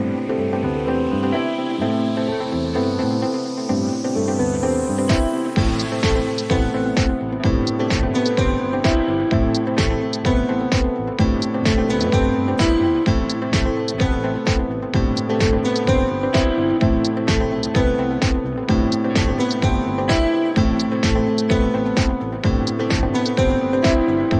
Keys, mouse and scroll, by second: 4.4 click, 5.1 click, 7.5 right click, 10.0 click, 11.1 click, 13.1 click, 14.5 click, 14.9 ctrl+d, 18.3 click, 19.9 click, 22.2 click, 23.2 right click.